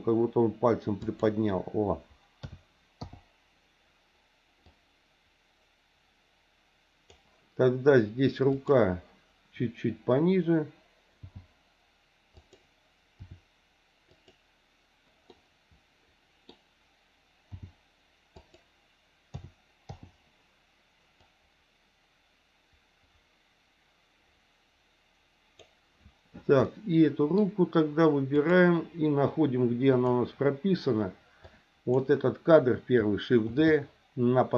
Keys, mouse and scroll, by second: 2.4 a, 3.0 i, 4.7-7.2 drag, 8.5 click, 11.3 g, 13.2 r, 15.3-17.5 middle drag, 17.5 g, 19.4 a, 19.9 i, 21.2-25.7 drag, 26.7 middle click, 28.3 click, 30.0 click, 31.4 click, 33.6 shift+d.